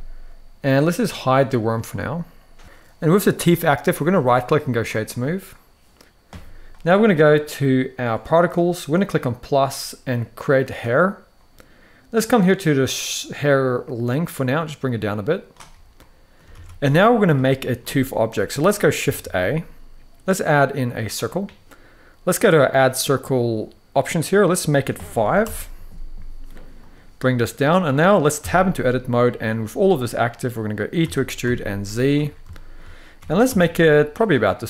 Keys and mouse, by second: 1.4 click, 3.9-4.5 right drag, 8.0 click, 9.1 click, 10.3 click, 12.0-15.2 drag, 15.7-16.1 middle drag, 16.2 alt+a, 16.5 middle click, 17.5 middle click, 18.9 shift+a, 24.4 click, 26.5 click, 27.4 middle click, 28.1 Tab, 30.7 e, 31.2 z, 31.7 click, 32.2 shift+middle click, 32.9 g, 33.2 z, 33.9 click, 34.2-34.6 middle drag.